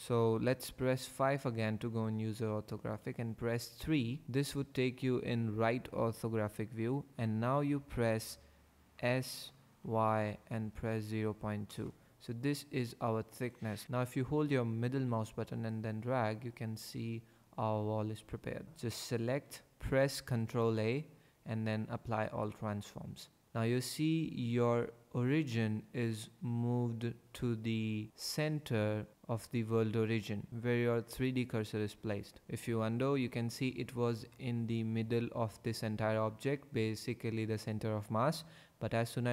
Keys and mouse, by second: 1.0 KP_5, 3.0 KP_3, 8.9-11.2 typing, 11.7 KP_Enter, 18.9 click, 20.4 ctrl+a, 32.5 ctrl+z.